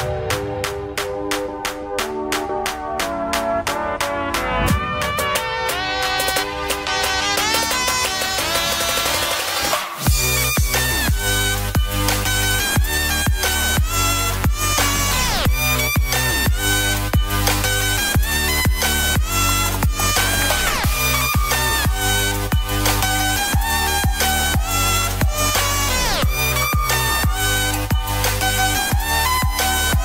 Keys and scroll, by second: 0.4 ctrl+=, 1.1 space, 1.5 [, 5.7 ctrl+z, 7.7 ], 15.6 [.